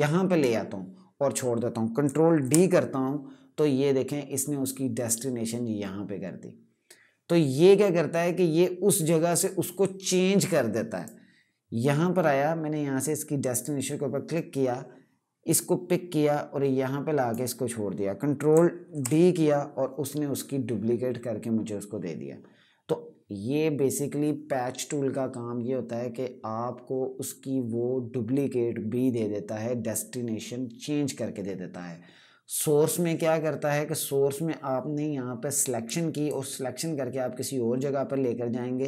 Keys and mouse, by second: 2.1 ctrl+d, 10.7 click, 18.6 d, 32.2 click.